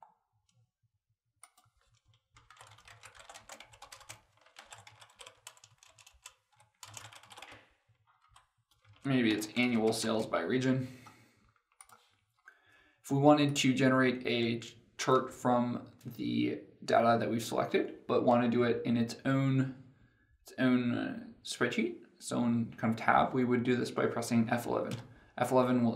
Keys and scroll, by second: 24.8 F11.